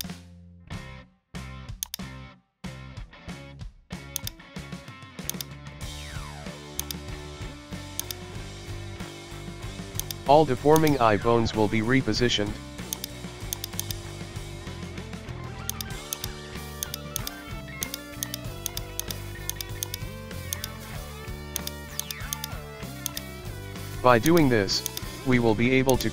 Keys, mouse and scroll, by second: 4.2 click, 5.3 click, 6.8 shift+click, 10.0 click, 10.4-10.8 scroll up 2, 10.8 right drag, 11.5 Tab, 12.9 click, 13.8 click, 14.1-15.3 shift+middle drag, 15.3 g, 16.1 right click, 16.7 g, 17.2 right click, 17.6 g, 18.2 right click, 18.4 g, 19.0 right click, 19.3 g, 19.9 right click, 20.4 g, 20.7-21.6 middle drag, 21.6 right click, 21.7 g, 22.4 right click, 22.7 g, 23.2-24.3 middle drag, 24.3 right click, 24.6 g, 25.1-25.9 shift+middle drag, 25.9 right click.